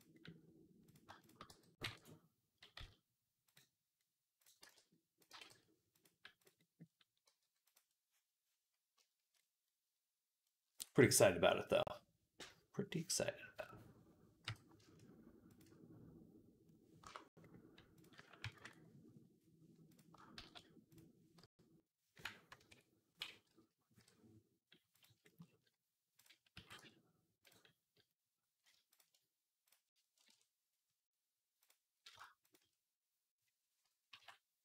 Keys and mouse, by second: 0.0-6.3 drag, 1.3 g, 4.4 b, 5.1 g, 6.3 middle click, 6.6-7.7 drag, 7.2 g, 7.7-8.8 middle drag, 9.2-17.2 drag, 14.3 k, 18.4 ctrl+KP_Add, 20.3 shift+s, 22.4 ctrl+KP_Add, 23.8 i, 25.1-26.4 shift+middle drag, 26.4-28.6 drag, 26.4 x, 28.9-32.0 drag, 32.5-34.6 drag.